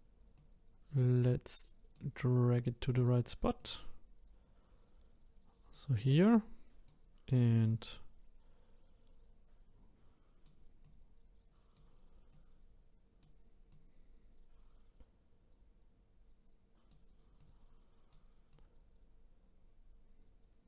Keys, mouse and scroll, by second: 0.3 click, 2.6 click, 3.6 click, 6.2 click, 7.3 click, 10.8-12.4 drag, 13.7 click, 17.4-18.6 drag.